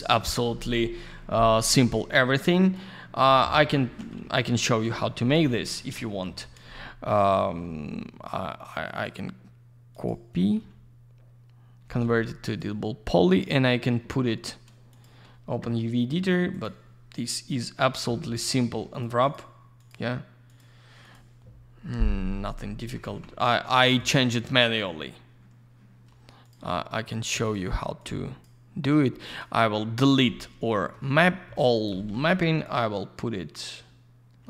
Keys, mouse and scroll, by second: 2.6 click, 2.7 click, 3.3 F4, 4.1 alt+й, 4.5 alt+middle click, 4.8 alt+я, 4.9 click, 5.6 F4, 5.7 alt+middle click, 6.0 middle click, 6.2 middle click, 8.8 right click, 9.0 right click, 9.9 click, 10.0 click, 12.4 click, 12.5 click, 13.2 click, 13.3 click, 14.9 click, 15.0 click, 16.0-16.5 scroll down 1, 16.5 click, 16.9-17.3 scroll up 1, 17.3-17.8 scroll down 1, 18.0-18.6 scroll up 1, 18.6 й, 18.9 click, 19.2 click, 19.7 click, 20.4 click, 21.0 click, 21.1 click, 23.0 ctrl+я, 23.9 click, 24.0 click, 24.5-24.8 scroll up 1, 24.9 scroll down 1, 26.4 click, 26.5 click, 27.2 click, 27.2 click, 27.4 right click, 27.5 double right click, 27.9 click, 29.2 click, 29.3 click, 29.9 scroll down 1, 30.2 alt+middle click, 31.7 click, 31.8 click, 32.6 click.